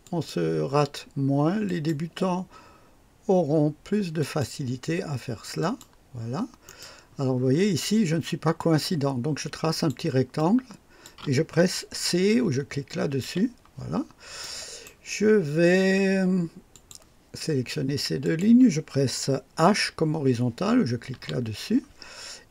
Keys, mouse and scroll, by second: 0.0 click, 1.6 click, 4.1 click, 5.5 click, 6.6 right click, 7.3 scroll up 1, 8.5-10.0 drag, 10.3-11.2 drag, 13.2 c, 13.8-14.1 scroll down 1, 14.4-15.0 right drag, 16.7 click, 18.2 click, 21.1 h.